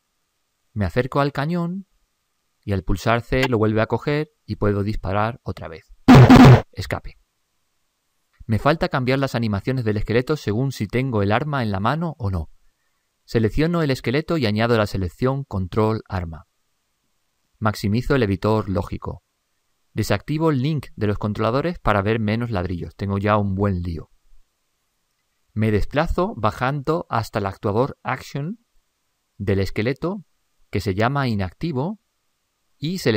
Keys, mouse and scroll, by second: 14.8-16.6 drag, 17.7-19.4 drag.